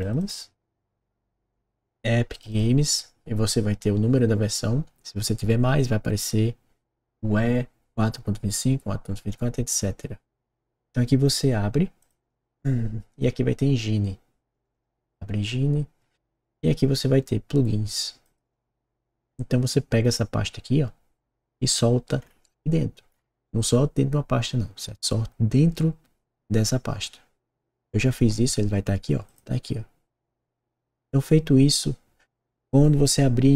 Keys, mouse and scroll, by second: 0.1 click, 2.3 click, 2.4 click, 11.9 click, 12.1 click, 14.4 click, 14.6 click, 18.2 click, 18.3 click, 29.2 click.